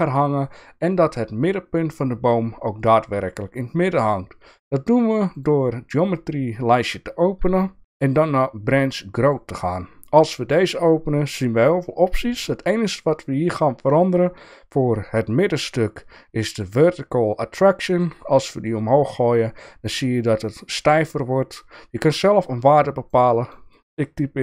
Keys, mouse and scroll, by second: 5.4-9.3 drag, 18.0-23.2 drag, 23.4-24.4 drag.